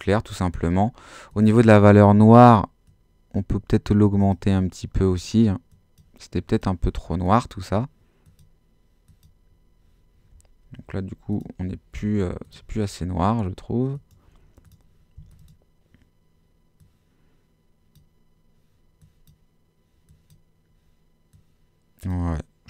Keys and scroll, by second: 11.9 Escape.